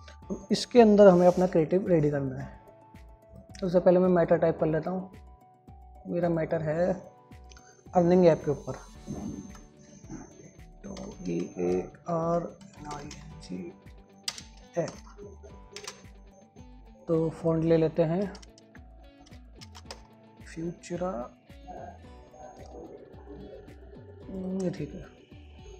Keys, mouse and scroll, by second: 0.4 shift+click, 3.8 shift+Num_Lock, 3.8 shift+click, 11.3-15.7 typing, 16.1 ctrl+shift+space, 16.8 shift+click.